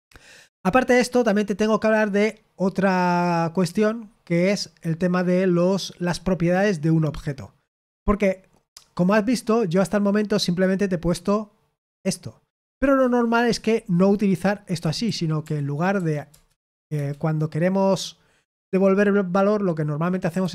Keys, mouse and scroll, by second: 3.2-3.9 scroll down 1, 3.9-4.6 scroll down 1, 4.6-5.8 scroll down 1, 5.8-7.3 scroll down 1, 7.3-9.2 scroll down 1, 9.2-10.7 scroll down 1, 10.7-12.4 scroll down 1, 12.4-13.5 scroll down 1, 13.5 Escape, 14.5-16.9 typing, 16.2 Return, 20.0-20.5 typing.